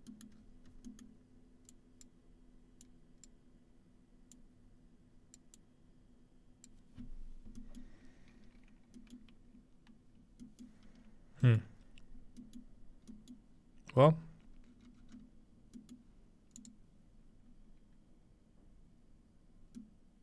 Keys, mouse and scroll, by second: 0.3-0.8 scroll up 3, 1.3 scroll up 2, 1.7-3.3 drag, 4.3 click, 5.6 click, 12.4 scroll up 2, 13.6-13.9 scroll down 3, 14.0 scroll up 2, 14.2 scroll down 2, 14.4 scroll up 1, 14.7 scroll down 1, 14.8-15.3 scroll up 3, 16.6-17.9 drag.